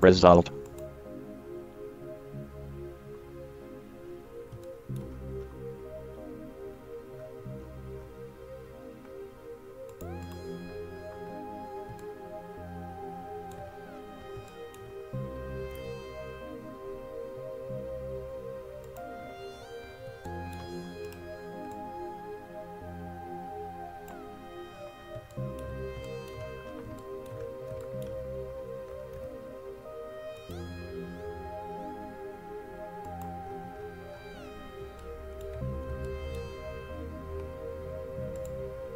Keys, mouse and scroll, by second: 4.9-5.7 middle drag, 11.1-12.2 middle drag, 11.1-11.8 scroll down 1, 12.3-16.3 middle drag, 15.9 g, 19.8 middle click, 21.3-23.0 right drag, 22.1-23.6 drag, 25.0 middle click, 27.4 middle click, 27.6 middle click, 29.4 g, 33.8 middle click, 36.8 middle click, 38.6-38.9 drag.